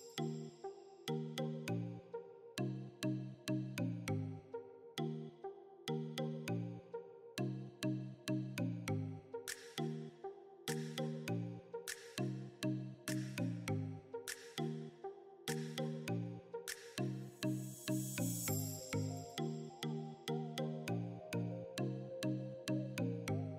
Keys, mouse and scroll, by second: 4.2-4.7 scroll down 1, 4.7 click, 6.5-6.9 scroll up 1, 8.3-15.0 drag, 19.5-20.0 scroll down 1, 20.3 click, 21.8 scroll up 1, 22.9 space, 23.2 click, 23.2 space.